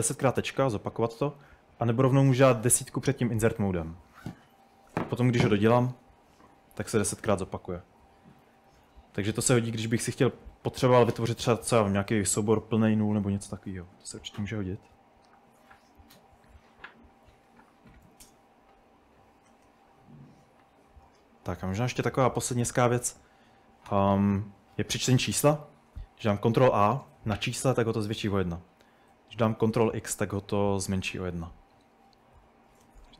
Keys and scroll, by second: 2.7-5.8 typing, 7.0-11.5 typing, 17.0-18.6 typing, 19.8-22.6 typing, 26.3 ctrl+a, 29.6 ctrl+x, 33.0-33.1 typing.